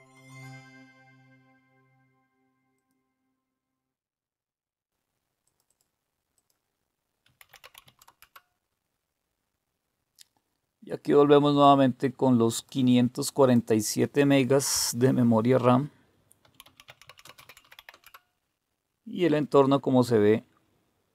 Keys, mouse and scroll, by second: 2.8 click, 3.4-4.4 drag, 5.5 click, 6.4 click, 7.0-8.2 typing, 11.6-12.7 drag, 13.5 click, 16.2-18.3 typing.